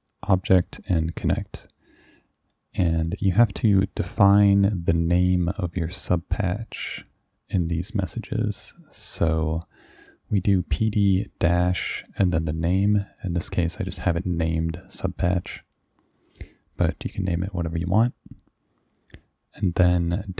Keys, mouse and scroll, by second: 2.4 click, 3.0 click, 6.6-9.1 drag, 9.3 click, 9.9 click, 13.8 click, 15.7 click.